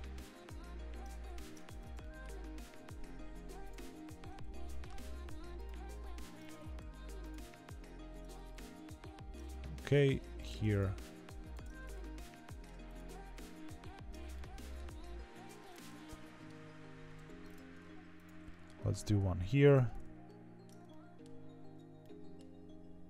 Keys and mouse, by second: 1.6 Tab, 1.9 middle click, 2.7 3, 3.5 click, 4.3 2, 4.6 middle click, 6.7 ctrl+e, 8.0 Tab, 8.4 middle click, 9.7 Tab, 10.1 3, 10.3 click, 12.1 middle click, 14.3 shift+middle click, 15.7 middle click, 17.1 2, 17.4 click, 18.4 middle click, 18.8 ctrl+e, 20.2 middle click, 20.8 shift+middle click, 21.9 middle click.